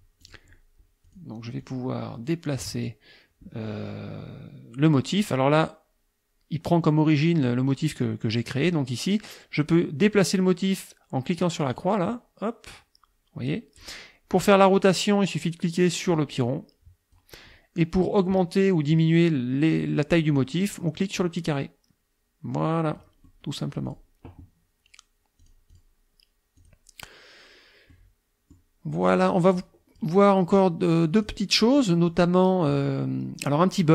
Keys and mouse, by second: 0.2 click, 1.1 click, 1.6 click, 2.2 middle click, 11.8-14.0 drag, 16.1-17.4 drag, 21.2-23.2 drag, 23.3 middle click, 25.4 click, 26.6 click, 27.9 middle click, 29.2 click, 29.6 click, 30.5 click, 31.8 click.